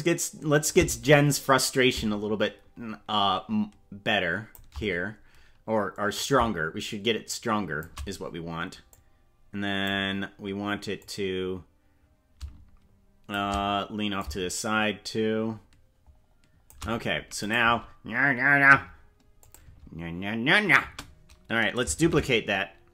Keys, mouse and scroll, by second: 1.9-4.5 drag, 6.1-7.8 drag, 8.9 click, 11.0-13.3 drag, 14.1-16.7 shift+drag, 17.4 click, 17.7 space, 18.7 space, 19.4 click, 19.7 space, 20.9 space, 22.1 shift+d.